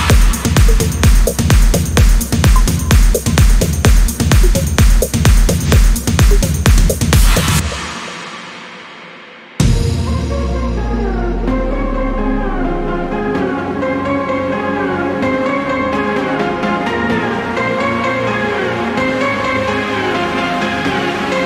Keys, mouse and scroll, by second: 0.0 click, 1.7-2.8 drag, 3.4 click, 4.9 click, 7.3-13.3 drag, 14.1 click, 16.1 click.